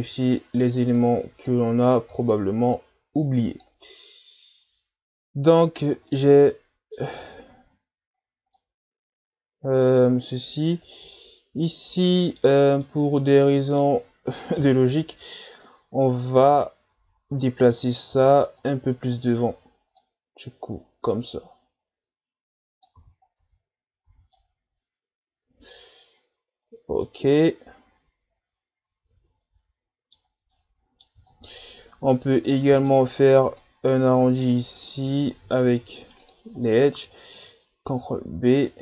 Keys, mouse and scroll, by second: 0.0-4.0 drag, 4.0-5.8 scroll up 3, 5.8-6.1 scroll down 1, 6.1-7.5 middle drag, 7.5-8.6 ctrl+scroll up 9, 8.6-10.8 middle drag, 10.8 right click, 11.2-14.6 middle drag, 14.6 KP_7, 15.7-16.5 scroll down 1, 16.5 z, 16.9 Tab, 17.9 right click, 18.1 b, 20.0-23.0 drag, 23.0 z, 23.4 scroll down 1, 23.4 Tab, 24.0 a, 24.4-27.5 middle drag, 30.6-31.3 middle drag, 31.3-31.6 shift+scroll down 1, 31.6-32.1 scroll up 1, 32.1 right click, 32.4 Tab, 32.6 middle click, 33.5 right click, 34.4 shift+right click, 34.8 middle click, 35.6 ctrl+Tab, 36.6 right click, 37.9 ctrl+b.